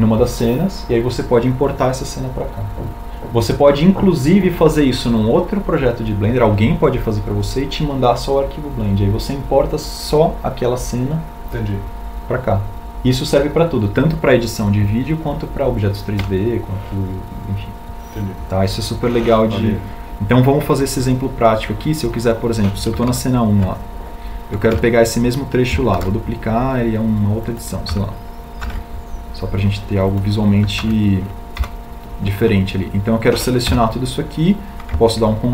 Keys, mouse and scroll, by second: 25.3 shift+Tab, 27.3 a, 28.4 shift+d.